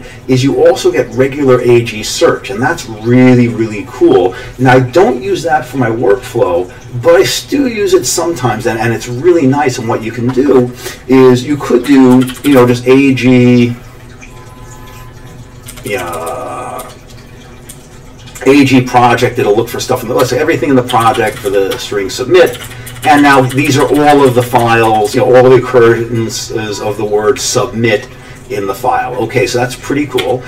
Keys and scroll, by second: 11.8 Escape, 11.9-12.9 typing, 15.7 Down, 15.8 Down, 16.0 Down, 16.1 Down, 20.7-24.2 typing, 30.2 q.